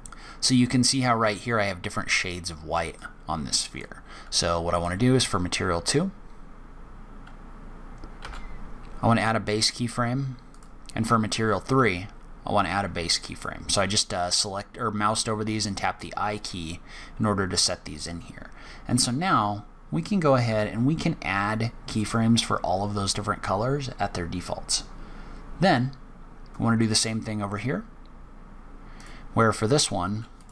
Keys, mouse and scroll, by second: 2.9 click, 4.7 click, 10.5 click, 11.6 click, 13.1-13.5 scroll down 3, 18.6-19.1 scroll down 4, 19.1-19.5 scroll up 3, 25.7 click, 28.9 click.